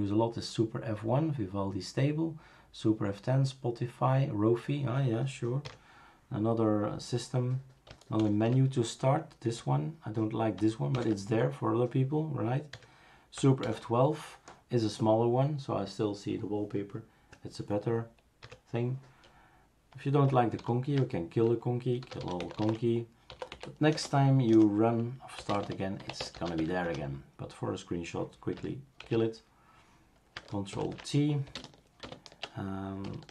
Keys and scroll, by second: 8.2 super+F11, 9.5 Escape, 10.9 super+F11, 12.9 Escape, 13.6 super+F12, 18.4 Escape, 20.6 ctrl+alt+t, 21.8-27.0 typing, 29.0 shift+super+q, 30.7 ctrl+alt+t, 31.5 super+space, 32.0 super+space.